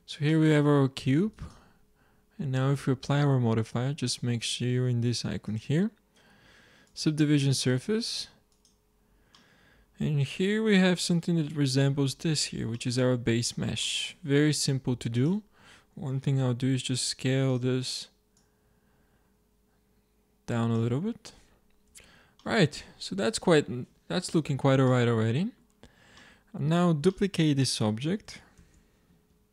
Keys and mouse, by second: 0.2 middle click, 1.2-3.0 drag, 5.4-7.2 drag, 8.4-10.2 drag, 12.6 middle drag, 13.1 Tab, 15.1-16.8 drag, 16.3 s, 18.7-20.0 drag, 21.9 Tab, 26.4-27.1 middle drag, 28.5 shift+d.